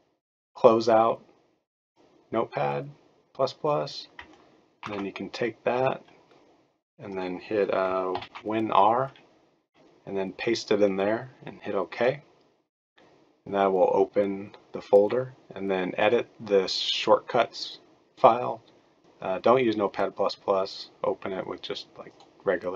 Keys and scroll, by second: 4.8 ctrl+c, 8.1 super+r.